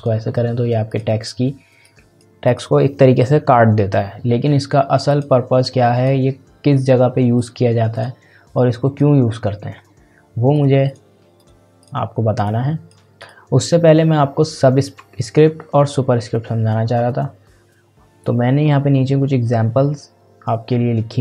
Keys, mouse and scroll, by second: 5.1-13.2 drag, 18.2-21.2 drag.